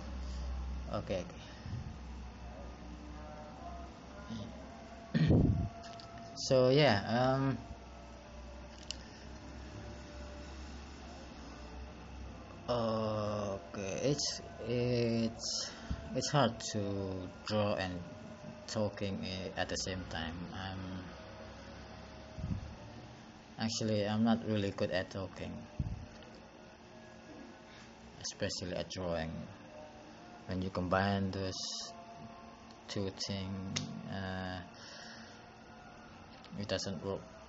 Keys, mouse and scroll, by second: 0.2 click, 23.0 click, 31.1 click, 33.1 click.